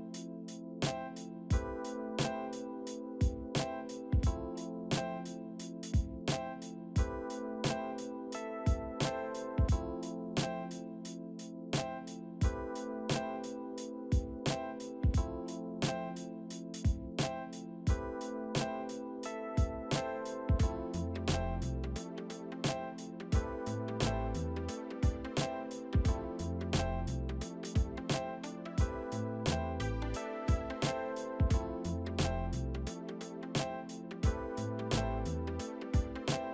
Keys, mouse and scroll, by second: 0.0 middle click, 4.2 F4, 9.5 right click, 10.1 double click, 11.8 alt+shift+middle click, 16.5 w, 22.6 middle click, 30.8 e, 31.2 alt+click, 35.3 right click, 35.7 double click, 36.2 right click, 36.4 double click.